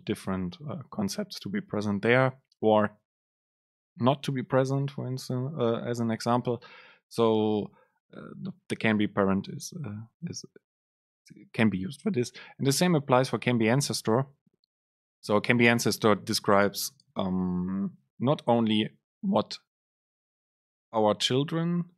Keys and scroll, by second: 15.4 Right.